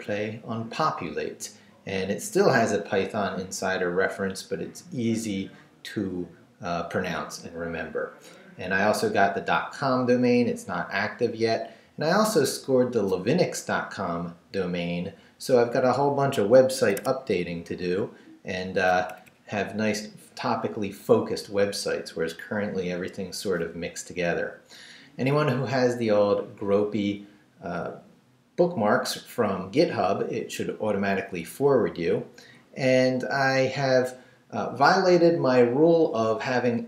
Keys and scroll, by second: 16.9 Escape, 17.9 Up, 19.1 Up.